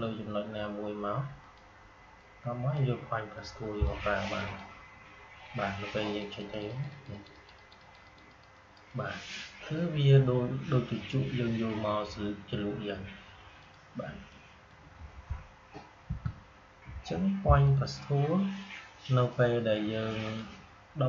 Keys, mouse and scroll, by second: 13.5-16.0 drag, 16.0 Delete, 17.5 click.